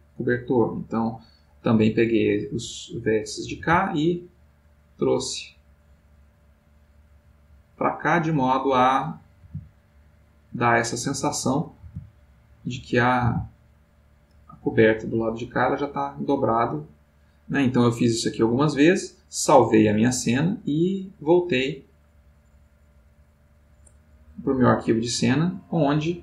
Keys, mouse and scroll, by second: 0.5-5.1 drag, 0.5-5.1 middle drag, 7.3-9.8 middle drag, 9.8 g, 23.4 click, 25.1 click.